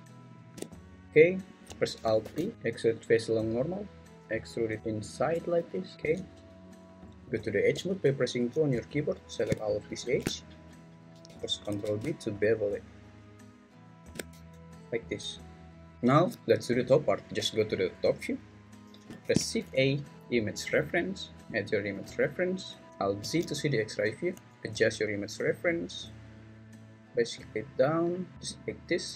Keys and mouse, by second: 0.4 shift+click, 2.2 alt+e, 7.7 2, 9.0 alt+click, 11.6 ctrl+b, 14.0 shift+click, 14.3 Tab, 17.4 `, 19.2 shift+a, 22.9 `, 23.2 alt+z, 24.3 s.